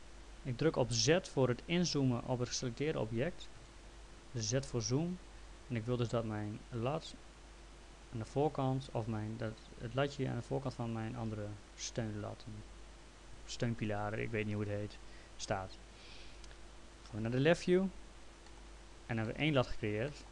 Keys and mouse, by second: 3.4-4.1 typing, 5.9 click, 17.0-17.7 typing, 18.5 middle click.